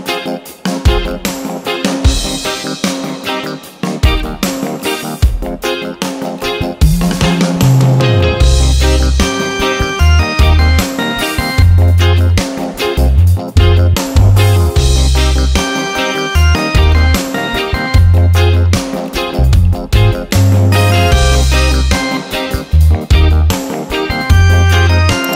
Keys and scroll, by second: 2.6 ctrl+d, 5.5 ctrl+d, 7.5 ctrl+d, 8.1 space, 9.3 ctrl+d, 9.7 space, 11.5 ctrl+d, 13.0 ctrl+d, 15.3 ctrl+d, 17.1 ctrl+d, 19.5 ctrl+d, 21.2 ctrl+d, 23.3 ctrl+d.